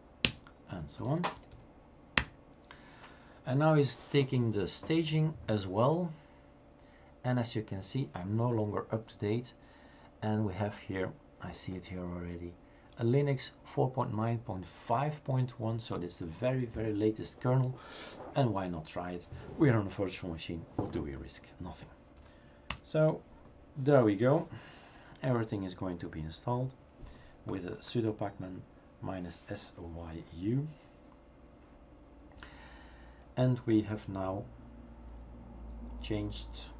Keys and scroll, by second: 0.0-3.6 typing, 0.2 Return, 22.2-22.7 typing.